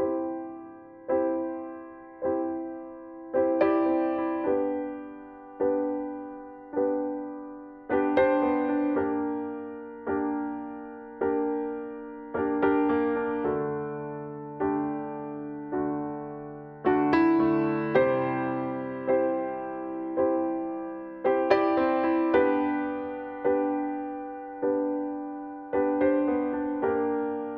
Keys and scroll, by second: 12.1 ctrl+l, 25.3 ctrl+b.